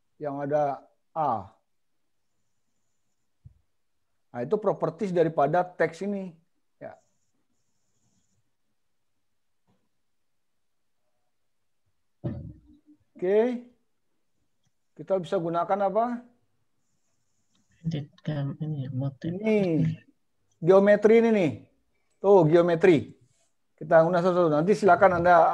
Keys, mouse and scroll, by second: 22.1 click.